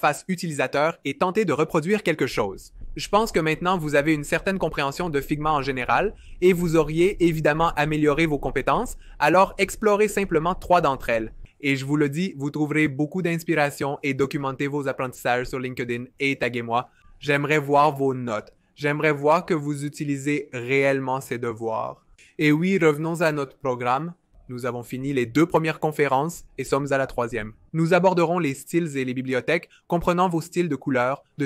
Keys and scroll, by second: 23.9 2.